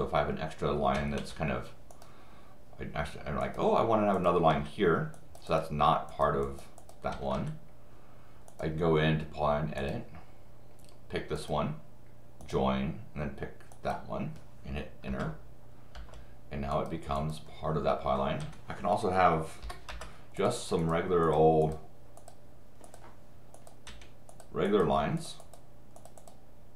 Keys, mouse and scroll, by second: 0.9 Escape, 1.9 click, 3.4 click, 4.5 Escape, 5.1 click, 5.5 click, 6.1 click, 6.4 click, 6.8 click, 7.1 Escape, 7.3 Escape, 8.5 click, 9.8 click, 11.4 click, 12.4 click, 13.7 click, 15.1 Return, 15.9 Return, 16.7 click, 17.2 click, 18.4 Escape, 19.9 Return, 20.4 click, 20.8 click, 21.2 click, 21.6 click, 22.2 click, 22.8 click, 23.5 click, 23.9 Escape, 24.3 click, 24.7 click, 25.2 click, 25.4 click, 26.0 click, 26.2 click.